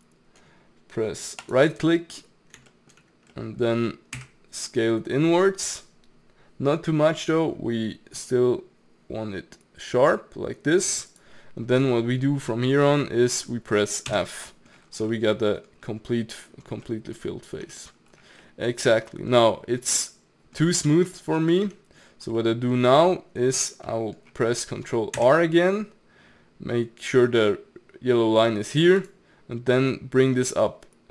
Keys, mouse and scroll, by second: 1.9-4.1 middle drag, 4.1 s, 11.9-14.1 middle drag, 14.1 f, 14.5 middle click, 14.9 scroll up 4, 15.1 middle click, 15.7-16.9 scroll down 1, 16.9-17.6 middle drag, 17.6 Tab, 17.9-18.4 scroll down 3, 18.4-19.9 middle drag, 19.9 scroll up 1, 20.0-21.7 middle drag, 21.7 Tab, 22.4 middle click, 22.7-23.0 scroll down 1, 23.0-23.8 scroll up 1, 23.8 scroll up 1, 23.9-25.1 middle drag, 25.1 ctrl+r.